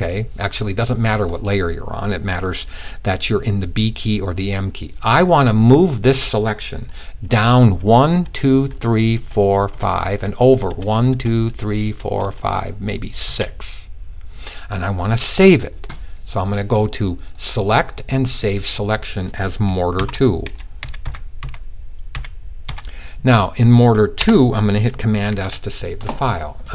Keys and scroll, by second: 7.3-11.7 typing, 12.8 typing, 19.5-22.1 typing, 24.8 s.